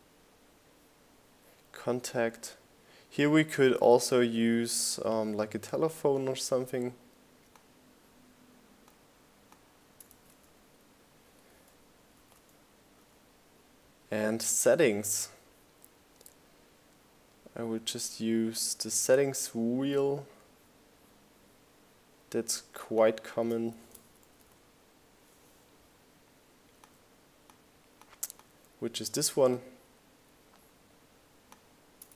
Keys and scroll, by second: 4.8 super+c, 6.9 super+v, 18.2-19.3 typing, 26.6 super+c, 28.0 super+v.